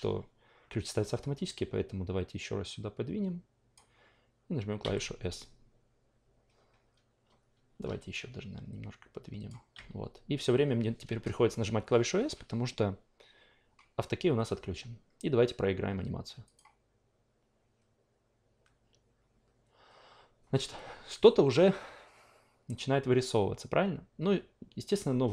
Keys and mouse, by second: 1.2-3.9 drag, 8.1-9.5 drag, 9.8 s, 16.4 click.